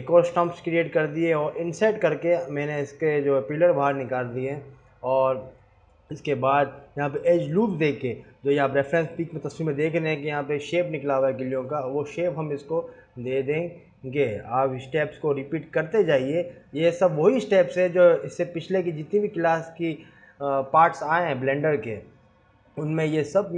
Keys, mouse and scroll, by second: 2.5 click, 3.1 ctrl+z, 4.1 ctrl+r, 5.0 ctrl+r, 6.5 ctrl+r, 7.7 ctrl+r, 9.3 scroll down 1, 9.8 click, 10.0 3, 10.1 click, 11.1 alt+shift+click, 12.6 alt+e, 14.0 scroll down 3, 14.4 scroll up 4, 15.2 scroll up 1, 15.4 2, 15.7 click, 16.7 click, 17.3 alt+click, 17.8 alt+shift+click, 18.2 alt+shift+click, 18.6 ctrl+z, 18.6 scroll up 1, 19.0 alt+shift+click, 19.4 alt+shift+click, 20.1-20.5 scroll up 1, 20.6 alt+shift+click, 21.1 g, 22.9 alt+shift+click, 23.1 scroll down 1.